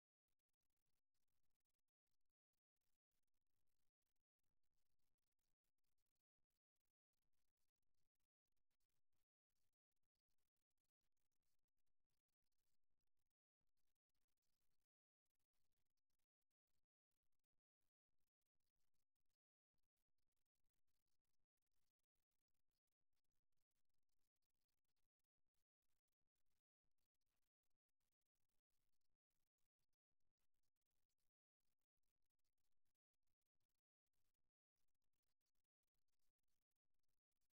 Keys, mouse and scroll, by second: 4.9-6.7 drag, 7.2-9.0 drag, 8.0-9.0 right drag, 10.9 f, 12.1-14.1 middle drag, 14.8-16.8 middle drag, 16.8-18.5 right drag, 19.6-22.3 middle drag, 22.3-24.1 drag, 25.7-27.7 drag, 28.1 alt+f, 29.3 middle click, 32.5-34.3 drag, 34.9-36.7 drag, 37.3-37.5 middle drag.